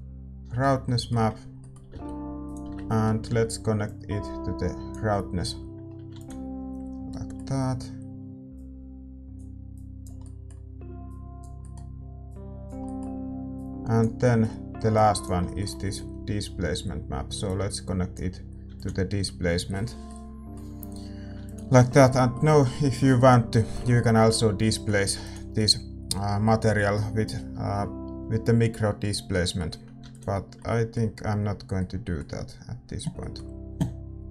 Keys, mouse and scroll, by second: 2.4-4.8 middle drag, 5.7-18.1 middle drag, 7.2 ctrl+s, 11.0-20.0 drag, 19.0 ctrl+s, 20.0-34.3 middle drag, 22.0 ctrl+s.